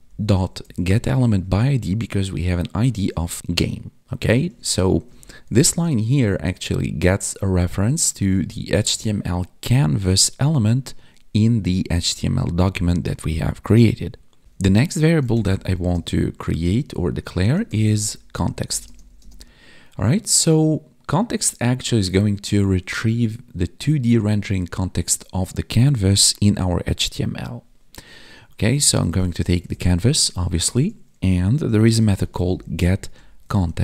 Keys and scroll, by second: 1.4 Tab, 3.4 ctrl+s, 5.0 Right, 6.1 ctrl+s, 15.8 space, 18.8 space, 19.1 space.